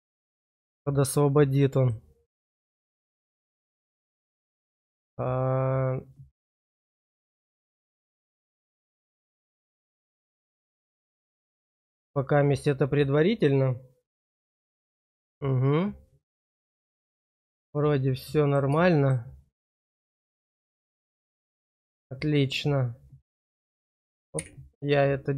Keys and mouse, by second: 0.5 middle click, 1.1 click, 8.6-10.7 drag, 17.9 middle click, 19.0 shift+middle click, 20.7 middle click, 21.4 shift+middle click.